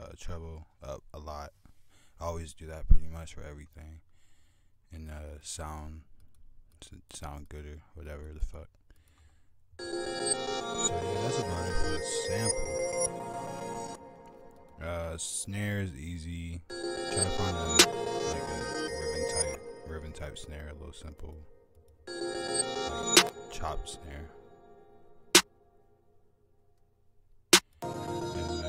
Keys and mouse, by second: 3.2 click, 3.9 click, 5.0 !, 11.3 click, 12.9 F1, 12.9 click, 14.1 click, 14.5 click, 16.0 F1, 16.0 click, 18.1 F1, 18.1 click, 21.1 click, 22.1 click, 23.0 click, 24.8 drag, 26.7 click, 28.5 click.